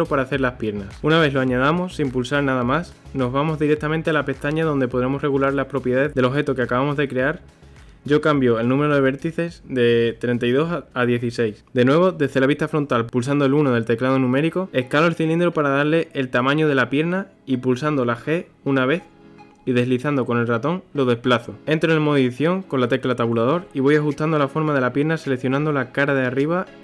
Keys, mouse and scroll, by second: 5.5 click, 6.5-9.6 drag, 13.4 scroll, 13.7-15.0 middle drag, 15.0 KP_1, 16.1 s, 18.7 g, 20.7 scroll, 21.6 shift+middle click, 21.8 Tab, 22.3 3, 22.8 click, 23.4 KP_1, 23.8 g, 26.0 middle click, 26.6 3.